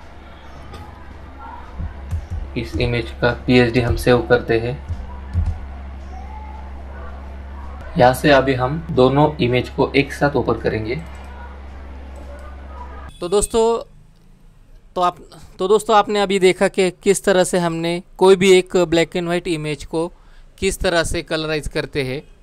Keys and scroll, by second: 3.9 ctrl+s.